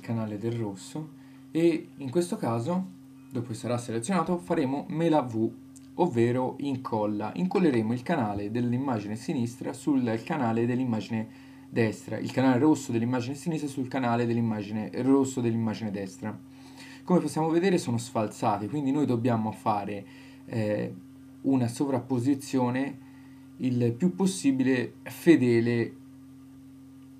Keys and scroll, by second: 4.1 super+v, 13.6 Left, 23.4 Left.